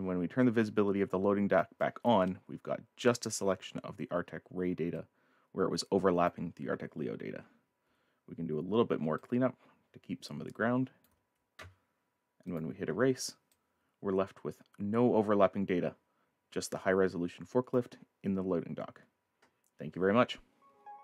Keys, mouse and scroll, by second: 0.4 click, 1.8 right click, 1.8 click, 2.2 click, 4.2-4.8 scroll up 2, 4.6 middle click, 5.0 click, 9.2 ctrl+alt+click, 12.5 click, 13.5 click, 18.1 scroll down 1.